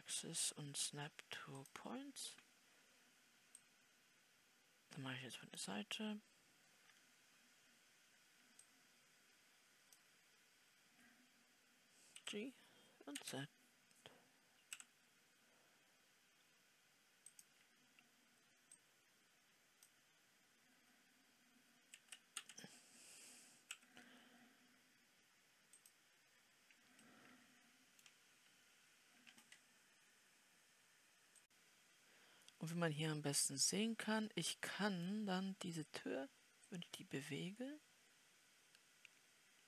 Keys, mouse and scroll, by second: 7.3 scroll down 3, 9.2-31.4 drag, 32.0 scroll up 2, 33.3-39.6 middle drag.